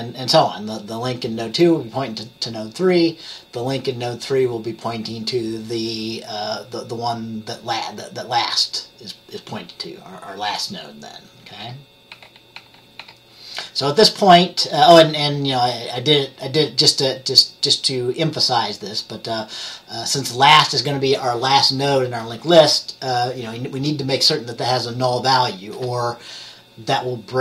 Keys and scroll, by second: 11.7 F10, 12.2 F10, 12.7 F10, 13.1 F10.